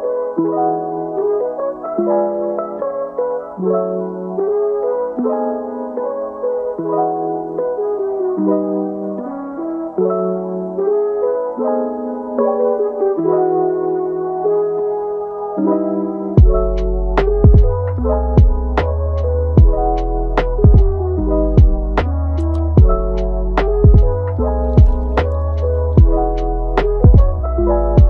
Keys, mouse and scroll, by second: 3.4 click, 3.9 scroll up 1, 4.0-7.0 middle drag, 8.4 click, 8.6-11.3 drag, 12.2-15.1 drag, 21.7-22.5 middle drag, 22.5 scroll down 4, 23.5 scroll up 1, 23.6 click.